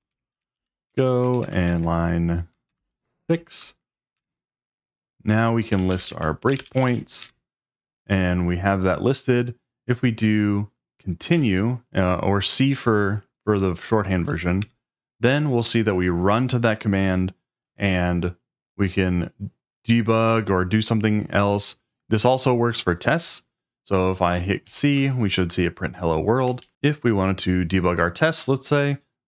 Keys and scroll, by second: 0.0-3.2 typing, 4.1 Return, 5.5-7.3 typing, 11.3 c, 14.6 Return, 24.6 typing, 24.9 Return, 26.6 ctrl+d.